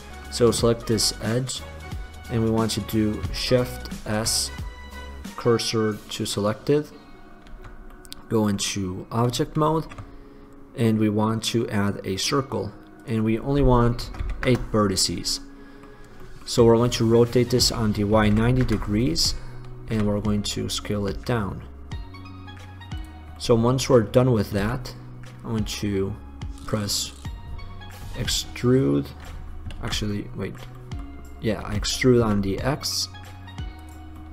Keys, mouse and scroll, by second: 0.9-2.2 drag, 4.1 shift+s, 7.7 Tab, 8.1-9.8 drag, 9.8 shift+a, 13.3-15.0 drag, 15.6-17.0 middle drag, 17.0 click, 17.0 r, 20.2 s, 23.4 drag, 23.6 middle click, 24.8 Tab, 28.3 e, 29.1 click, 30.0 ctrl+z, 31.8 e, 34.0 click.